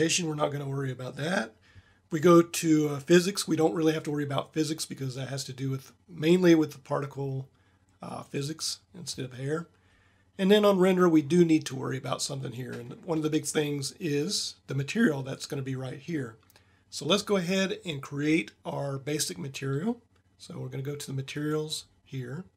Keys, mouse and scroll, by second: 11.0-17.2 drag, 21.2-22.5 drag.